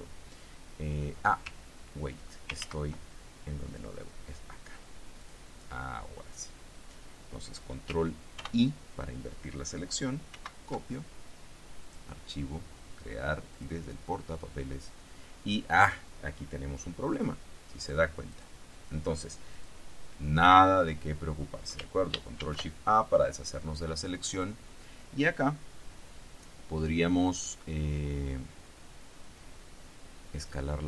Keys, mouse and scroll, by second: 2.8 ctrl+z, 3.8 click, 5.4 click, 8.5 ctrl+i, 10.5 ctrl+c, 12.0 click, 13.7 click, 17.3 click, 18.0 click, 18.4 click, 19.7 click, 22.6 ctrl+shift+a, 24.5 click.